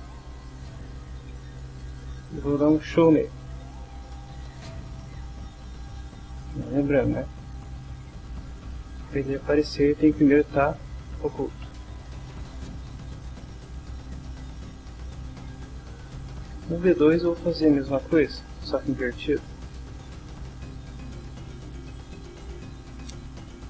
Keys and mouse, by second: 0.6-2.6 typing, 3.5 Return, 5.4 click, 6.4 click, 11.1 click, 12.6 click, 13.7 click, 14.4-15.9 drag, 17.7-20.1 typing, 20.6 Return, 21.4 Down, 22.0 Up, 22.2 Return, 23.0-23.6 typing.